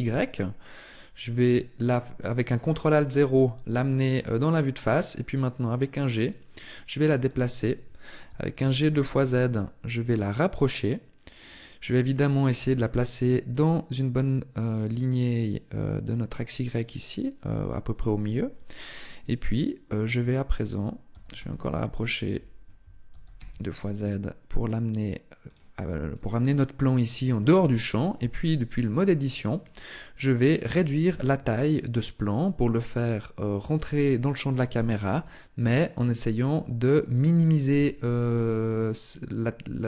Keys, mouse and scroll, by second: 0.6 right click, 2.9 g, 7.0 click, 8.0 g, 11.3 click, 12.4 g, 16.6 click, 20.9 g, 22.9 g, 25.3 click, 25.9 right click, 28.0 Tab, 29.4 shift+right click, 30.6 s, 32.7 click, 33.3 right click, 34.0 shift+right click, 34.8 s, 37.1 click, 37.6 Tab, 38.0 middle click.